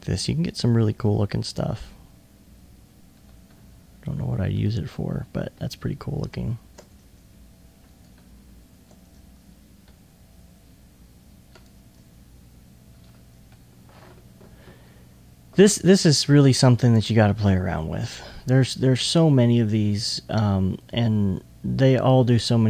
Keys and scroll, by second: 4.5 alt+2, 5.0 alt+2.